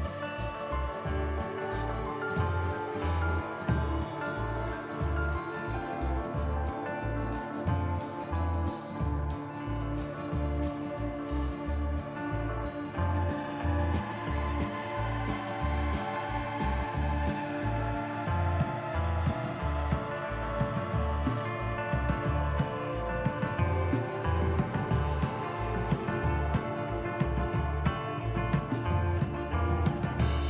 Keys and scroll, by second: 2.1 ctrl+z, 2.9 ctrl+z, 3.4 ctrl+z, 6.1 f, 7.5 ctrl+z, 10.1 ctrl+z, 10.6 ctrl+z, 14.2 ctrl+z, 26.8 ctrl+z, 27.4 ctrl+z, 28.1 ctrl+z, 28.7 ctrl+z.